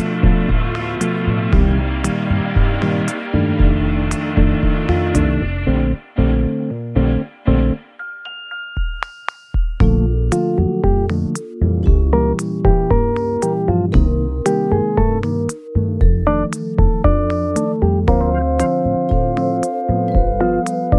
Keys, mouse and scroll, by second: 1.8 shift+a, 4.8-7.4 typing, 10.6 shift+middle click, 11.6 shift+middle click, 11.6-12.7 scroll up 6, 14.0 shift+a, 16.6-17.9 typing.